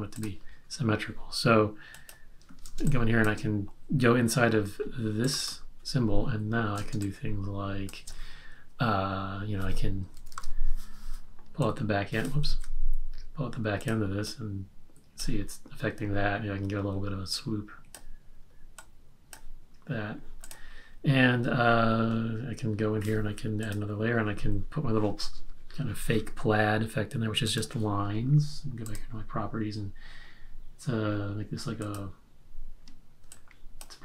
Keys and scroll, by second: 2.7 space, 6.9 space, 10.1 super+-, 12.4 super+z.